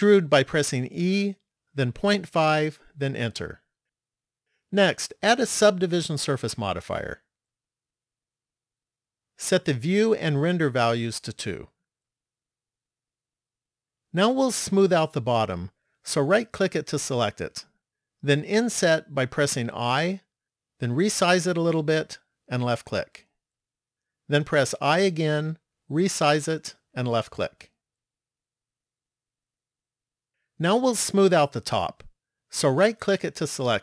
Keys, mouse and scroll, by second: 0.5 e, 5.8 click, 10.6 click, 13.0 middle click, 16.3 right click, 19.8 i, 25.0 i, 29.2 middle click, 32.8 right click.